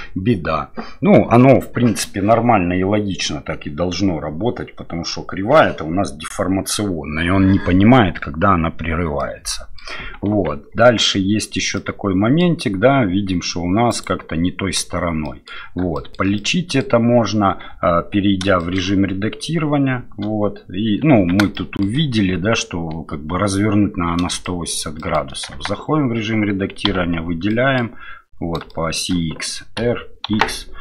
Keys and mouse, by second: 9.2 middle click, 10.3 Tab, 10.8 middle click, 11.8-12.4 middle drag, 13.9 click, 15.2 middle drag, 15.9 shift+middle drag, 16.4-16.8 middle drag, 17.7 Tab, 18.6 shift+middle click, 21.2 Tab, 21.5 shift+middle click, 24.4 shift+middle drag, 25.0 shift+middle click, 25.5 Tab, 26.9 a, 27.5 middle click, 28.7 shift+middle click.